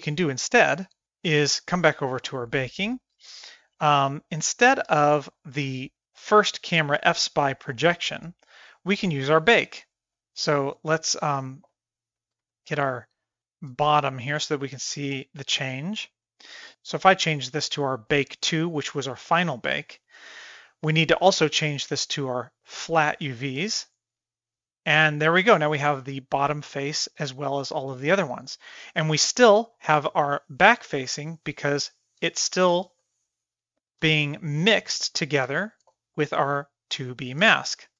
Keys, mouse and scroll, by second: 3.7-4.6 drag, 4.9-5.4 shift+middle drag, 5.9 click, 8.0-8.9 shift+middle drag, 10.1 click, 10.8 middle drag, 11.4 shift+middle drag, 11.9 middle click, 12.2 middle click, 12.5 shift+middle click, 12.9-13.8 middle drag, 14.0-14.3 shift+middle drag, 17.2-18.6 drag, 21.8-24.0 drag, 27.3-27.9 middle drag, 28.9-29.7 middle drag, 30.5 middle click, 31.4 middle click, 33.0-34.0 shift+middle drag, 34.8 click, 35.6 shift+middle click, 36.4 click.